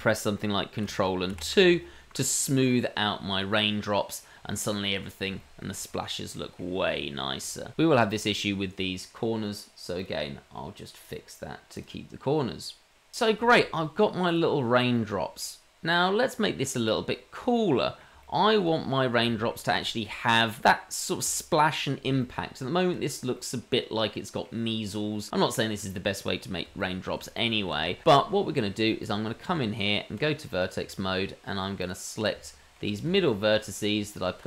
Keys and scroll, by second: 3.7 ctrl+2, 29.4 Tab.